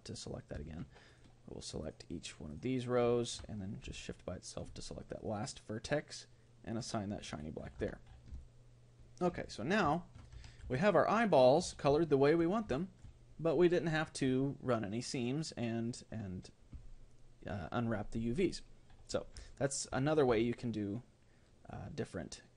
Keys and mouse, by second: 1.1-5.0 right drag, 4.0-5.8 middle drag, 6.8-8.4 drag, 7.8 Tab, 10.0-14.6 middle drag, 11.8 a, 19.5-22.5 middle drag.